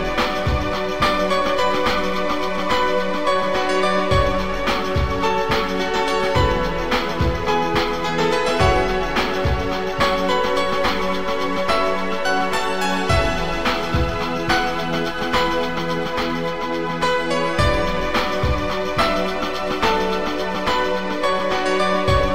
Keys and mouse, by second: 0.9 click, 2.3 shift+click, 4.8 click, 6.4 click, 7.1 right click, 8.6 click, 9.1 right click, 10.0 click, 10.7 click, 11.3 click, 11.9 click, 12.8 click, 13.8 click, 14.8 right click, 15.2 click, 15.8 Caps_Lock, 16.1 click, 17.0 click, 18.1 click, 20.4 click, 21.1 click, 21.3 shift+click.